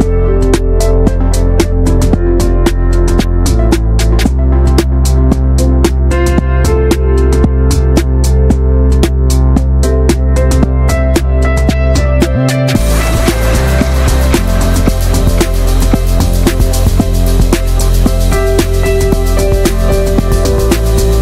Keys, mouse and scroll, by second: 0.1 click, 0.4 shift+middle click, 0.6 s, 3.3 shift+middle click, 3.9 s, 4.6-5.0 shift+middle drag, 5.0 click, 5.2 alt+shift+middle click, 5.5-5.9 shift+scroll up 1, 5.9 click, 6.1 scroll up 1, 6.2 shift+middle click, 6.5 click, 7.1 e, 8.9 scroll up 1, 9.1-9.6 middle drag, 9.6 Tab, 10.2-11.2 drag, 11.2 Tab, 11.5 shift+middle click, 11.9 ctrl+r, 13.6 middle click, 13.8 Tab, 13.9 scroll up 1, 14.1-15.1 shift+middle drag, 15.1 3, 15.2 drag, 15.7 alt+middle click, 15.9 scroll up 1, 16.2 shift+middle click, 17.1-17.5 scroll up 1, 17.5 ctrl+b, 19.3 click, 20.1 s.